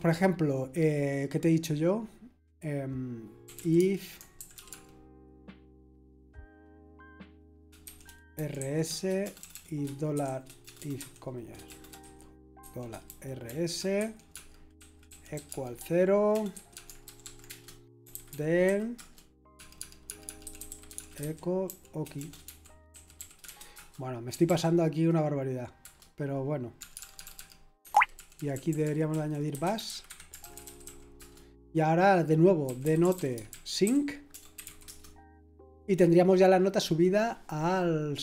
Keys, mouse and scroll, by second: 3.2-4.7 typing, 7.8-10.9 typing, 12.0-24.9 typing, 26.9 typing, 28.4-31.0 typing, 31.1 Escape, 32.4-35.3 typing.